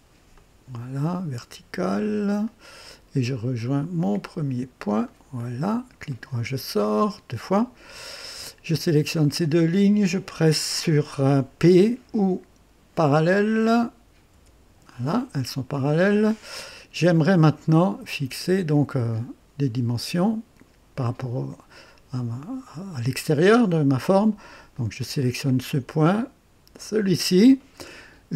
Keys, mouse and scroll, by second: 0.3 click, 2.4 click, 5.0 click, 6.1 right click, 6.8 right click, 8.1 click, 9.3 click, 14.3 p, 17.4-18.1 right drag, 24.7 click, 26.8 click.